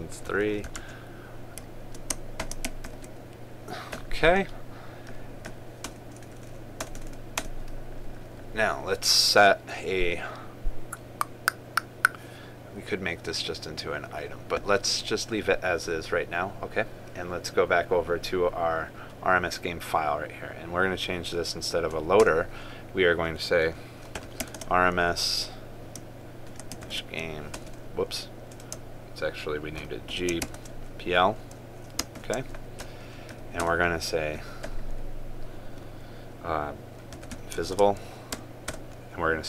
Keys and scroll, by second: 3.7 ctrl+v, 25.2 ctrl+space, 27.5 ctrl+space, 31.2 ctrl+space, 38.4 ctrl+space.